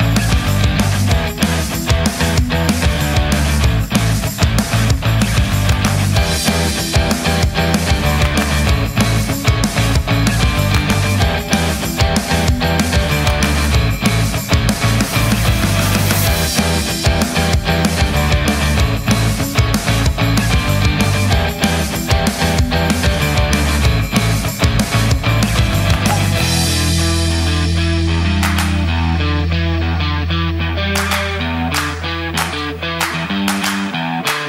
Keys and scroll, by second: 17.8 space, 23.3 space, 31.9 Delete.